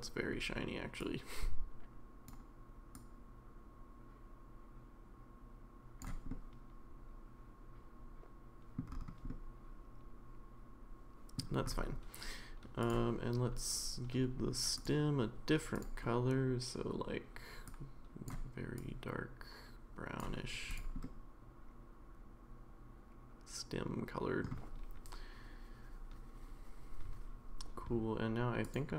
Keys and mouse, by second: 1.1-2.3 drag, 2.9-6.1 drag, 6.3-8.8 middle drag, 9.3-11.3 middle drag, 12.9-14.9 drag, 15.8 click, 20.7 click, 21.0-24.4 middle drag, 28.6 click.